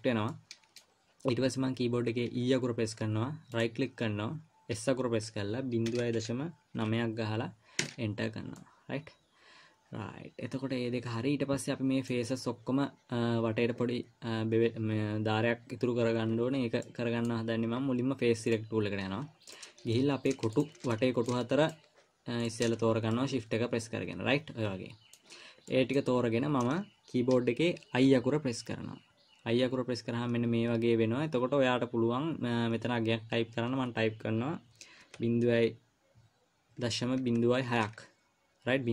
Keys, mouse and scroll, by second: 0.7 middle click, 2.7 e, 5.1 s, 9.0 middle click, 17.2 middle click, 18.9 click, 19.9 click, 20.3 middle click, 20.9 shift+click, 21.3 middle click, 22.0 shift+click, 22.8 shift+click, 23.1-23.5 scroll down 4, 23.5 middle click, 25.8 scroll up 1, 26.0 middle click, 26.5 scroll up 2, 28.6-28.9 scroll up 1, 28.6 i.